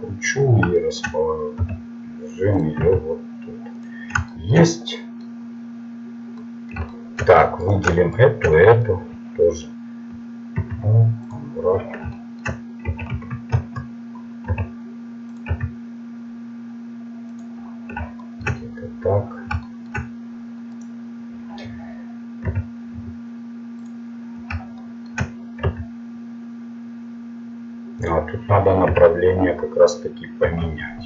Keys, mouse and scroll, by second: 1.6 g, 2.8 s, 4.7-6.8 middle drag, 6.9 middle click, 7.6-9.4 right drag, 10.6 u, 12.9 r, 14.5 g, 15.5 s, 18.1-20.7 middle drag, 20.7 right click, 22.4 u, 25.7 s, 28.9 r.